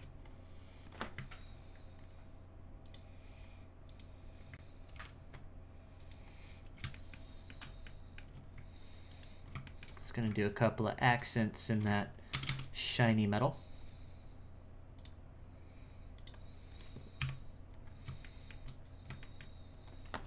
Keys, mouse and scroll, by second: 0.2-2.8 scroll up 2, 2.8-4.9 drag, 5.9 click, 6.4-6.9 scroll down 1, 6.9-9.1 shift+middle drag, 9.1 alt+right click, 9.6 shift+middle click, 10.0-11.0 scroll up 4, 11.0 alt+shift+right click, 12.3 ctrl+KP_Add, 12.5 ctrl+KP_Add, 14.9 click, 16.1-17.2 drag, 17.2 KP_1, 17.8-18.2 scroll up 3, 18.2 shift+middle click, 18.9-19.2 scroll down 3, 19.2-20.2 shift+middle drag.